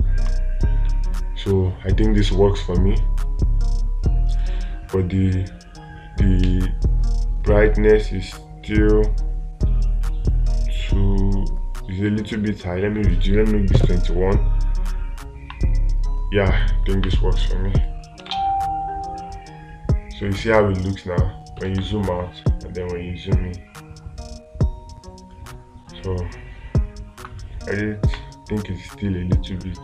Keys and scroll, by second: 22.1 space.